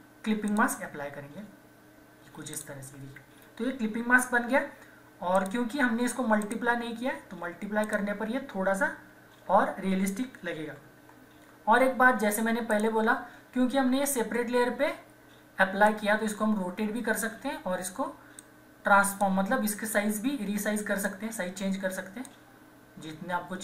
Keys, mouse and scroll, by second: 2.6 alt+click, 4.3 ctrl+-, 5.3 click, 9.4 ctrl+=, 10.7 ctrl+-, 12.7 click, 15.8-23.6 drag.